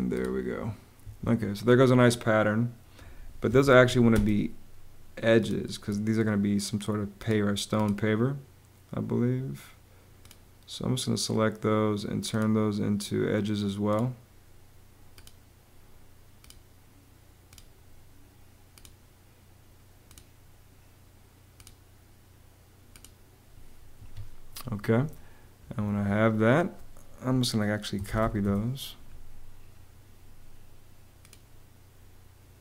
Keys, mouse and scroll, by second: 0.7 Escape, 3.2 m, 3.5 a, 3.8 space, 23.7 Escape, 27.4-28.4 typing, 29.0 Return.